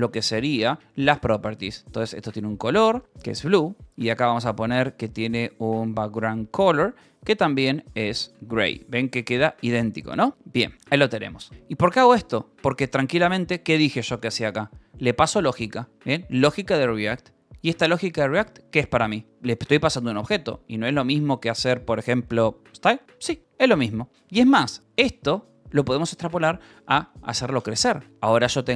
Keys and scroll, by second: 0.2-6.3 typing, 6.4 Return, 8.1-12.1 typing, 14.3-16.4 typing, 17.9 h, 19.2-24.7 typing, 22.7 Escape, 26.6 o, 28.0-28.7 typing.